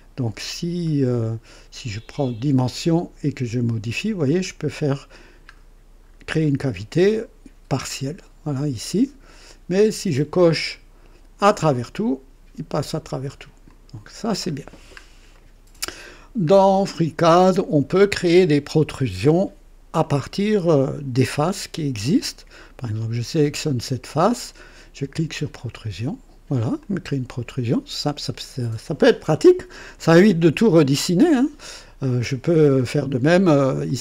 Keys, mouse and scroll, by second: 0.2 scroll down 2, 1.0-1.5 scroll up 2, 2.5 click, 3.1-3.6 scroll down 2, 4.4 scroll up 2, 6.0 scroll down 2, 7.0-9.7 drag, 10.4 click, 11.3 click, 13.6 click, 14.5-14.9 scroll down 2, 15.3-16.0 right drag, 16.2 scroll down 2, 16.6-17.3 right drag, 19.9-21.2 drag, 22.9 click, 25.5 click, 26.8-28.1 drag, 32.0 click, 33.8 click.